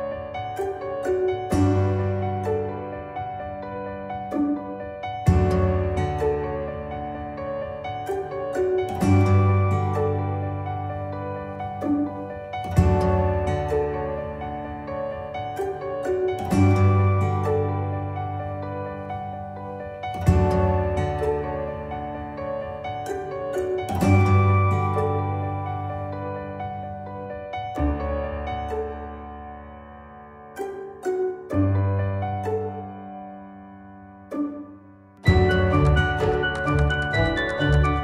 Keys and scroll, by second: 0.1 Caps_Lock, 0.7 y, 10.2 c, 17.6 ctrl+a, 18.6 y, 18.8 Caps_Lock, 19.6 r, 19.9 Return, 20.1 Caps_Lock, 20.6 l, 20.9 Caps_Lock.